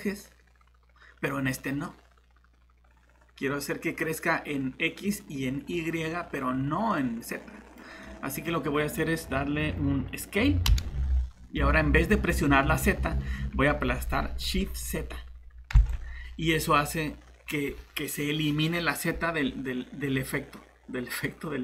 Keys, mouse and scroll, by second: 10.7 s, 15.1-15.9 typing.